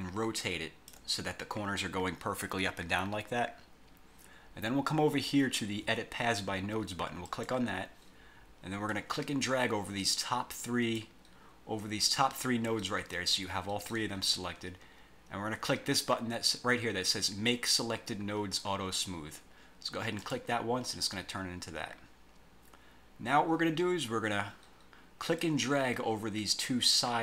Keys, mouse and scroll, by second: 7.4 click, 9.0-11.3 drag, 20.3 click, 25.5-27.2 drag.